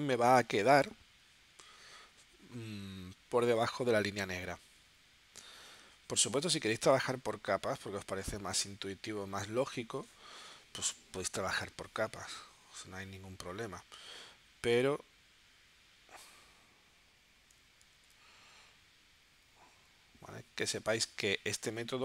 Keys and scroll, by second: 18.4 super+z.